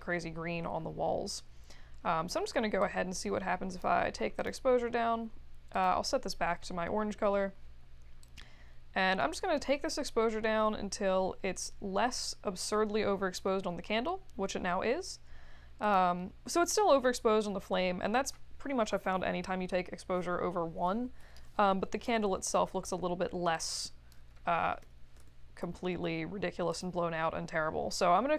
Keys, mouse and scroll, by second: 2.8 click, 8.3 click, 23.5 click, 24.8 7, 25.1 Return, 26.7 click.